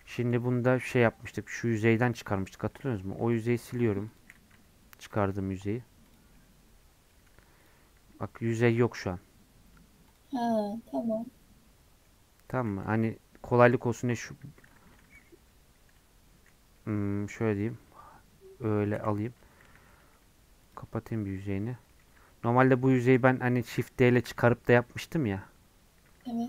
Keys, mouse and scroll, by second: 0.0 click, 0.2 Tab, 0.8 Tab, 1.4 g, 2.3 Tab, 2.7 middle click, 3.0 3, 3.4 click, 4.2 x, 4.5 Tab, 4.8 scroll down 1, 5.2 click, 5.4 middle click, 6.1 click, 6.3-7.7 middle drag, 7.7 click, 8.0 g, 10.2 click, 10.4 scroll up 1, 10.4-12.9 middle drag, 12.9 Tab, 14.4 Tab, 15.1 z, 16.8 middle click, 17.6 click, 18.9 /, 19.4 Tab, 20.7 click, 21.4 f, 21.9 middle click, 22.2 Tab, 22.8 Tab, 23.0 3, 23.2 click.